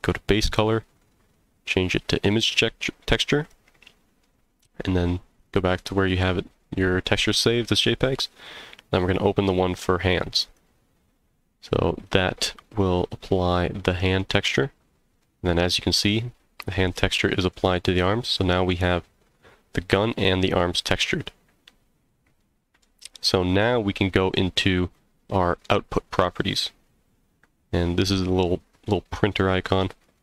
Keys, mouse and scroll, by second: 0.4-2.3 drag, 3.4 click, 12.6 click, 13.3-13.7 scroll up 2, 13.7-14.2 middle drag, 14.3 z, 15.2-16.1 middle drag, 16.2 scroll down 1, 17.2-17.5 middle drag, 18.4-18.7 middle drag, 20.5 scroll down 1, 20.9 z, 22.0 scroll down 1, 22.4-22.8 middle drag, 23.0-24.9 scroll up 1, 29.9 click.